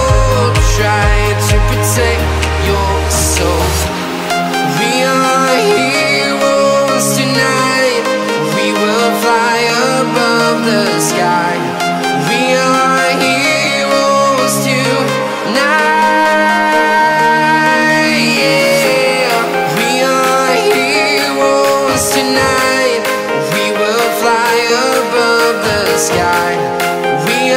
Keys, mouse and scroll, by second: 0.3 scroll down 1, 0.8-3.4 right drag, 3.4-5.2 shift+right drag, 5.2 scroll up 1, 5.5 right click, 6.0 scroll up 1, 6.8 scroll up 1, 6.9 right click, 7.6-8.0 scroll down 1, 8.2 right click, 9.2-12.0 shift+right drag, 12.0-14.1 right drag, 14.4 click, 14.8-15.1 scroll down 1, 15.8 scroll up 1, 16.6 click, 20.0 l, 20.9 Return, 22.3 Return, 27.4 scroll up 1.